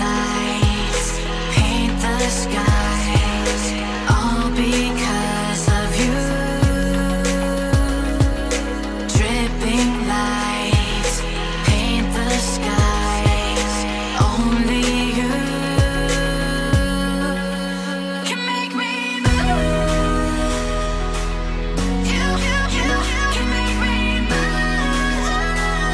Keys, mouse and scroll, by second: 9.3-10.2 typing, 10.4 Return, 13.4 9, 14.2 Return, 16.7 double click.